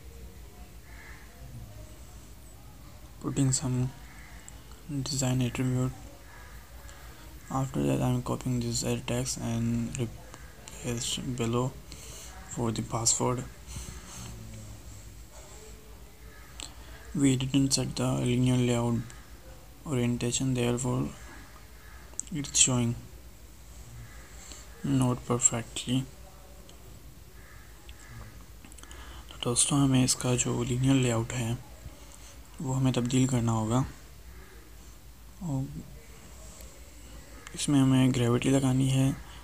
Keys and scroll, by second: 2.0 ctrl+shift+Left, 7.3 ctrl+c, 8.4 ctrl+v, 9.5 ctrl+Right, 11.4 ctrl+shift+Right, 15.6 ctrl+shift+Right, 27.9 ctrl+shift+Left, 28.4 ctrl+c, 29.8 ctrl+Left, 30.1 ctrl+Right, 31.0 ctrl+v.